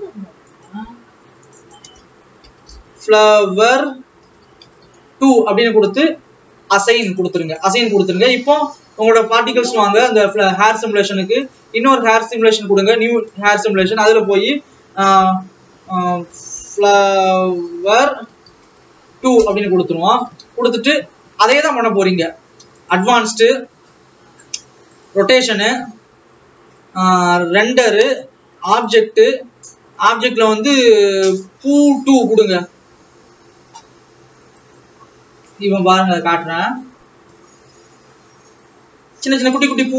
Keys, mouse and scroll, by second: 1.5-13.3 drag, 21.4 Tab, 22.9 click, 23.8 scroll down 2, 25.2 click, 25.6-28.3 scroll down 2, 29.4-33.3 drag, 33.3 alt+a, 35.7-37.4 drag, 37.4-39.9 scroll up 3.